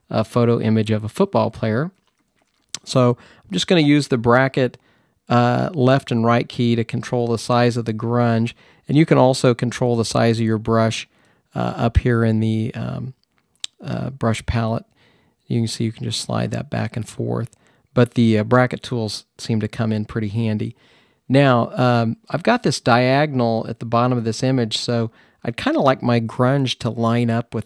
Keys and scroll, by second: 0.0-4.2 typing, 5.7-7.8 typing, 9.5-10.2 typing.